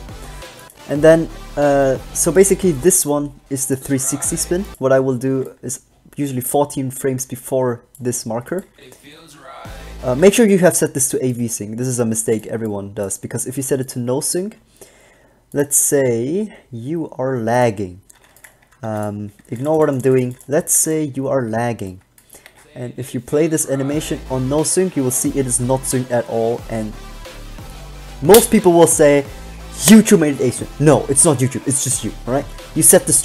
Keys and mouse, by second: 1.0-2.6 drag, 5.6 alt+a, 8.9 alt+a, 10.4 alt+a, 18.3-20.9 typing, 18.9 Tab, 22.7 alt+a.